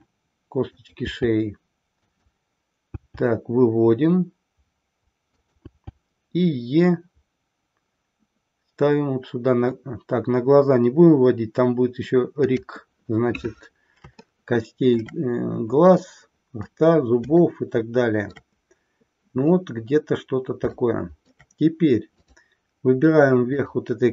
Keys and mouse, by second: 0.8 click, 2.1 click, 12.3 click, 14.3-15.2 shift+middle drag, 17.4-18.4 shift+middle drag, 20.8-21.4 shift+middle drag, 22.2-22.6 drag, 23.4 click.